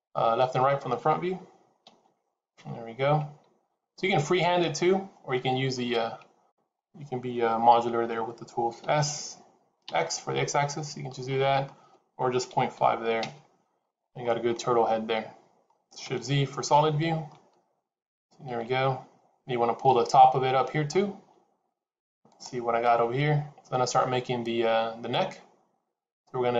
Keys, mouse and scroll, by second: 1.7 KP_1, 8.7 s, 13.9-14.3 scroll down 3, 14.1 middle click, 16.7 shift+z, 17.1 middle click.